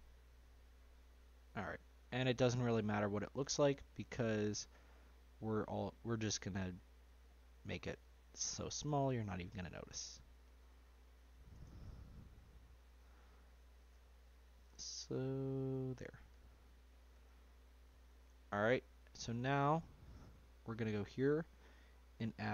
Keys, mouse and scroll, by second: 2.0 scroll down 1, 2.1-3.8 middle drag, 3.8 Tab, 5.2 click, 6.3 shift+click, 7.2 shift+click, 9.3 ctrl+b, 12.4 click, 13.7 shift+click, 14.6 ctrl+b, 16.6 click, 17.1 Tab, 17.5-18.7 scroll down 1, 18.7-20.2 scroll down 1, 20.5 click.